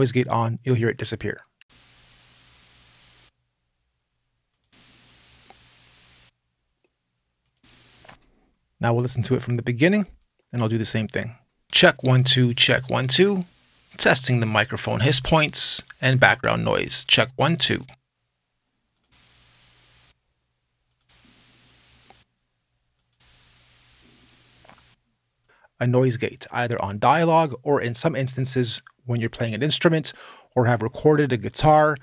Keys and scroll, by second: 1.4 space, 7.8 space, 11.3 space.